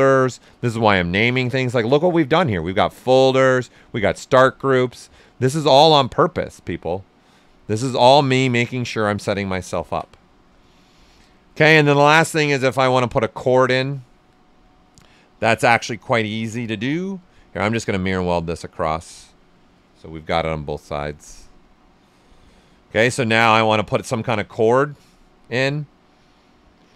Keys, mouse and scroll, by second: 6.4 click, 8.8-9.1 typing, 9.1 click, 9.2-11.1 ctrl+right drag, 13.9-17.2 drag, 17.2-18.6 drag, 18.6 click, 20.1 Down, 20.5 click, 21.2-23.2 right drag, 23.2 ctrl+right click, 23.5 ctrl+right click, 23.9 right click, 25.1-26.9 drag.